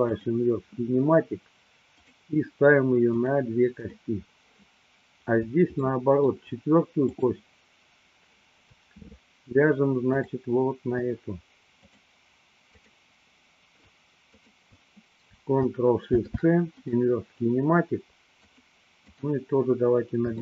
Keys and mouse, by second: 3.1 click, 4.0 click, 6.1-6.6 shift+middle drag, 7.3 click, 10.2 shift+click, 11.8 click, 13.0 click, 14.5 shift+click, 16.1 ctrl+shift+c, 18.3 click, 19.3 click.